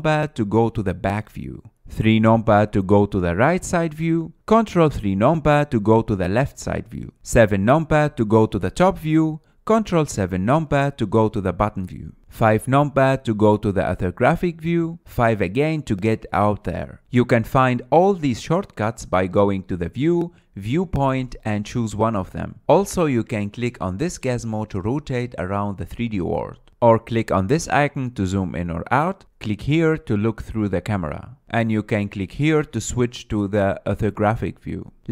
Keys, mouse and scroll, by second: 1.0 ctrl+KP_1, 3.5 KP_3, 5.7 ctrl+KP_3, 8.7 KP_7, 11.3 ctrl+KP_7, 12.3-14.2 middle drag, 14.2 KP_5, 15.9 KP_5, 17.0-17.4 scroll up 1, 17.4 KP_1, 18.0-19.9 middle drag, 19.9-23.0 drag, 24.0 scroll down 2, 26.9 click, 29.1-31.8 drag, 32.6 click, 33.5 click, 34.4 drag.